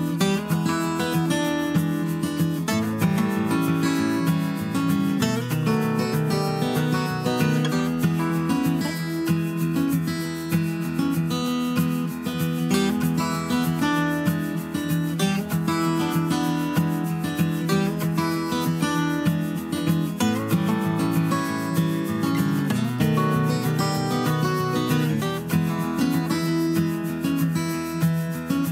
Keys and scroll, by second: 1.4 Tab, 1.6 Tab, 6.8 shift+Tab, 16.2 super+d.